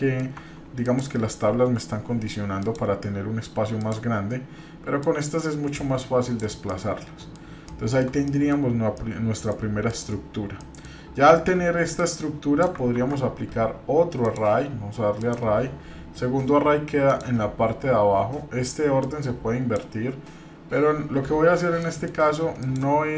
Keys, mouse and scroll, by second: 0.3 Tab, 0.8 click, 2.6 click, 3.8 click, 5.0-6.5 drag, 6.7 middle click, 7.7-8.1 shift+middle drag, 8.3 middle click, 8.7 scroll up 1, 8.9-9.5 middle drag, 9.8 click, 10.6 middle click, 12.0 click, 13.0 ctrl+z, 14.2-15.3 drag, 17.1 click, 19.0-22.8 drag, 23.0-23.1 scroll down 2.